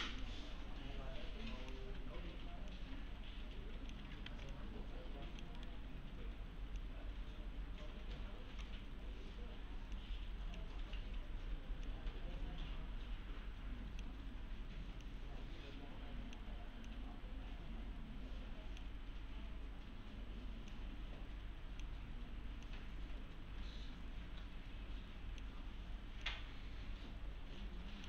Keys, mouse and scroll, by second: 4.3 alt+z, 4.5-5.5 click, 5.6 right click, 6.8-8.7 click.